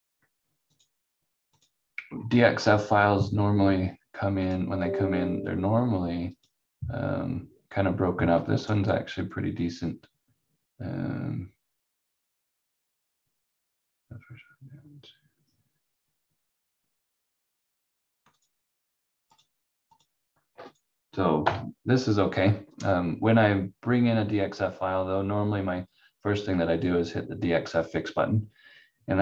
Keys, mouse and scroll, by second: 0.7 click, 2.1-2.6 scroll up 1, 4.4 click, 18.3 click, 21.4 F4.